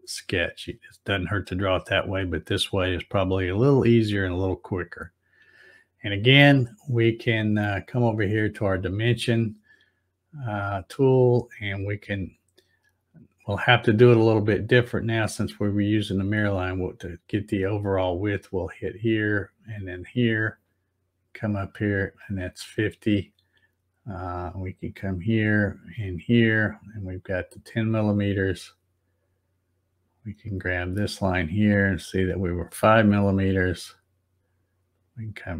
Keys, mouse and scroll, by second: 8.7 click, 18.0 click, 19.8 click, 21.6 click, 24.7 click, 26.1 click, 27.3 click, 30.7 click, 32.0 click, 34.9 click.